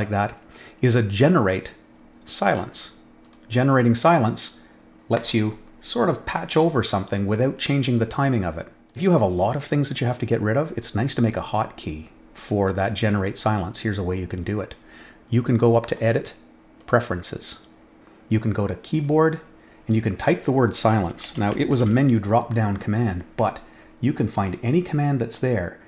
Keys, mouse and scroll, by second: 1.1 click, 3.2 click, 5.1 click, 8.8 click, 15.8 click, 16.7 click, 18.9 click, 20.1 click, 20.9-22.2 typing, 24.2 click.